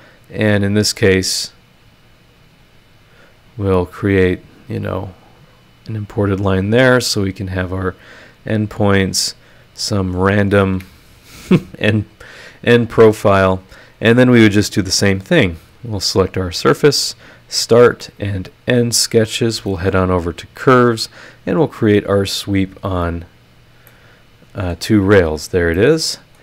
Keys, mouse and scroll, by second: 0.5 click, 2.6 click, 4.2 click, 6.1 click, 6.7 click, 7.1 click, 7.5 click, 8.0 click, 9.9 click, 10.7 Escape, 12.0 click, 14.0 click, 15.4 click, 16.2-17.0 ctrl+scroll, 17.0 ctrl+click, 17.3-18.3 ctrl+scroll, 18.3 ctrl+click, 18.6-19.2 ctrl+scroll, 19.2 scroll, 19.3 click, 20.1 click, 22.9 click, 23.2-23.8 scroll, 23.8-24.9 middle drag, 23.9 click, 23.9 right click, 25.0 scroll down 2, 25.5 scroll up 2, 25.7 middle click, 25.8 right click.